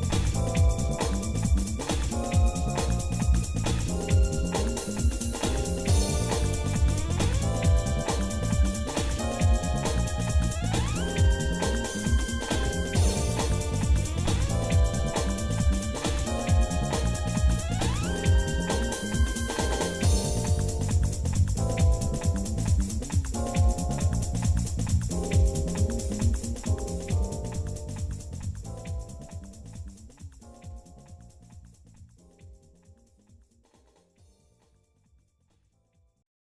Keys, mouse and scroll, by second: 2.8 e, 13.0-15.3 shift+middle drag, 15.7 shift+middle click, 16.1 shift+middle click, 17.4 KP_Divide, 18.3 shift+middle click, 19.0 middle click, 19.6 middle click, 20.1-20.6 scroll up 4, 21.6 ctrl+Tab, 23.0 middle click, 23.8 click, 24.6 click, 25.1 ctrl+Tab, 26.6 ctrl+Tab, 27.5 click, 28.1 shift+middle click, 28.7-29.0 scroll down 2, 29.1 middle click, 29.6 shift+middle click, 30.3-30.7 scroll down 2, 30.7 middle click, 31.9 shift+click, 32.6-33.1 scroll down 2, 33.1-34.1 shift+middle drag, 34.3 shift+middle click, 35.8-36.4 scroll up 2.